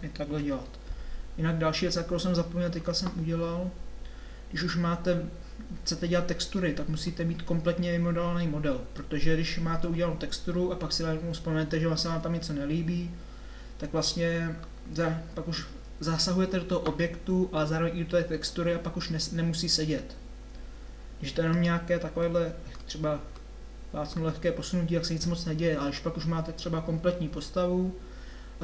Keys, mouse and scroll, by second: 0.5 KP_7, 3.6-5.1 middle drag, 5.7 middle click, 6.3-8.3 middle drag, 8.7-9.7 middle drag, 14.6 middle click, 23.4-25.4 drag.